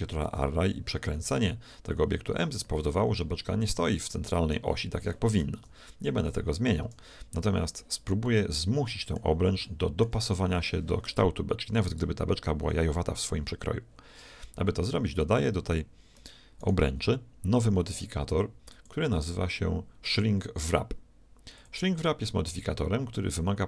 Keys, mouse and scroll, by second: 2.9-4.7 middle drag, 5.6 KP_1, 6.8 KP_Decimal, 8.3-11.6 middle drag, 12.4-14.7 middle drag, 16.6-18.4 right drag, 18.7-20.6 drag.